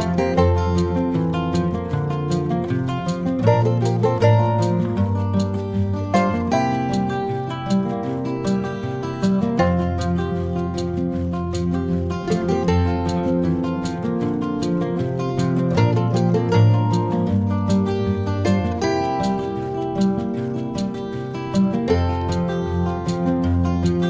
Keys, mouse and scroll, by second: 1.7 middle click, 3.0 s, 4.7 g, 7.9 click, 10.6 alt+click, 11.2 middle click, 12.6 alt+shift+click, 13.3 middle click, 15.2 shift+e, 17.1 a, 18.3 s, 22.0 ctrl+middle click, 22.8 middle click.